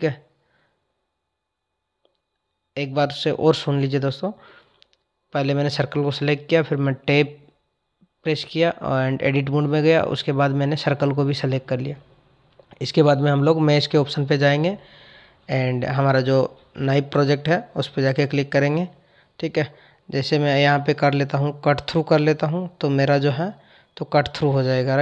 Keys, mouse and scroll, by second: 1.0 click, 9.9-13.0 drag, 13.3 ctrl+z, 16.9-19.9 drag, 20.6 click.